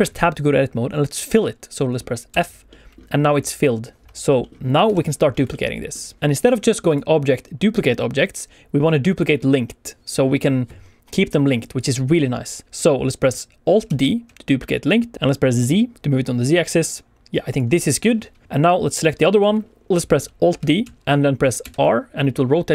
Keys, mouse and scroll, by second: 1.3 middle click, 2.2 f, 2.6 middle click, 4.0 Tab, 4.0 middle click, 4.3 middle click, 4.8 KP_1, 5.2 scroll down 1, 5.4 shift+middle click, 6.2 click, 6.8 click, 11.7 click, 12.0 click, 13.8 alt+d, 15.6 z, 17.4 click, 18.6 click, 19.9 click, 20.8 alt+d, 21.5 r.